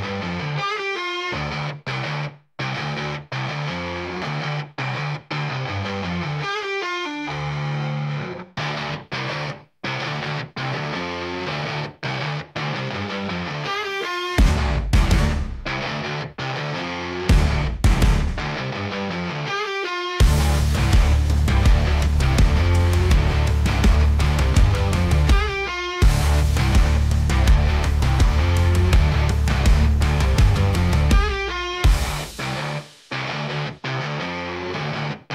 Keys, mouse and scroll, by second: 0.6 shift+middle click, 1.0 scroll up 1, 1.1-3.6 middle drag, 3.6-4.2 scroll down 8, 4.2-5.4 middle drag, 5.4 click, 5.8-7.3 middle drag, 7.7 click, 8.1 s, 10.0-10.8 middle drag, 10.8-11.2 scroll up 1, 11.2-11.8 shift+middle drag, 11.8 `, 12.3 `, 14.2 click, 15.7 click, 16.2 g, 17.8 middle click, 18.3 middle click, 22.2 click, 22.8 `, 23.8 g, 28.1-29.7 shift+middle drag, 29.8 click, 30.7 h, 31.1-32.6 middle drag, 33.8 click, 34.7 click, 35.2 h.